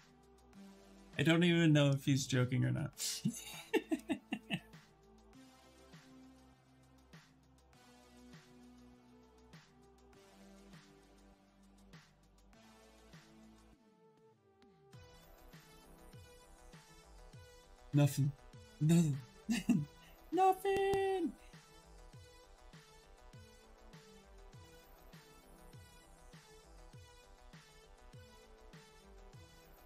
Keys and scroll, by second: 5.7 q, 7.3 w, 8.4 q, 10.6 e, 29.4 q.